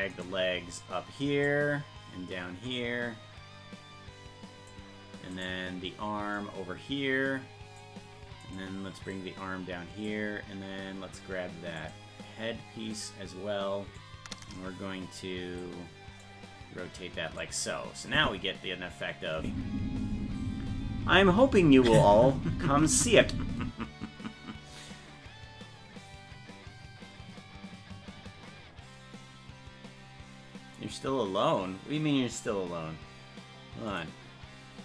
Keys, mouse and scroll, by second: 0.2 right click, 1.5-4.7 drag, 5.4 right click, 6.4-7.9 drag, 8.5 right click, 9.1 click, 11.8 click, 13.0 right click, 14.0-15.6 drag, 16.2-17.4 drag, 18.1 click, 19.4 space.